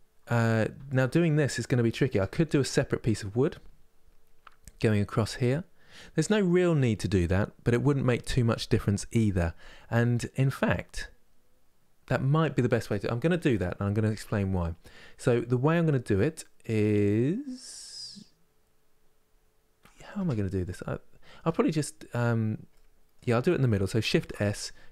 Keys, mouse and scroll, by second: 0.6-2.0 shift+drag, 2.0-5.0 middle drag, 9.8-18.3 middle drag, 19.9 Tab, 20.4-23.9 middle drag, 23.9 shift+s.